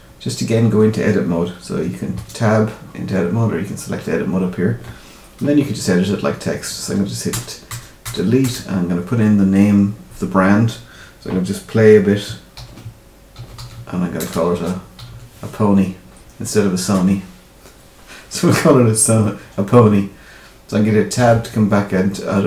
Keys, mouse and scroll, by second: 2.1 Tab, 7.3 BackSpace, 7.7 BackSpace, 8.0 BackSpace, 8.4 BackSpace, 12.5-15.1 typing, 21.1 Tab.